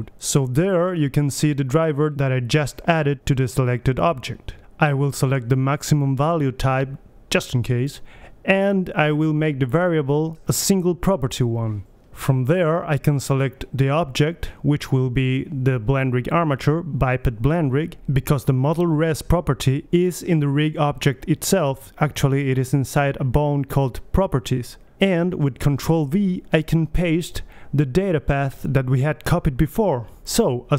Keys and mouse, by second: 0.7-2.2 drag, 2.5-4.5 drag, 5.5-7.4 drag, 8.3-10.2 drag, 11.8-13.7 drag, 27.9 ctrl+v.